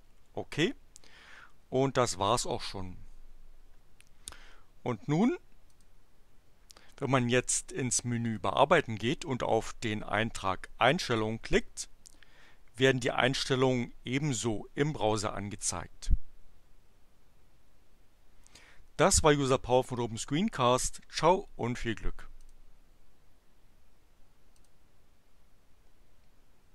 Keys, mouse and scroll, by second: 5.7 click, 8.2 click, 11.5 click, 21.2 click, 22.3 click, 24.6 click.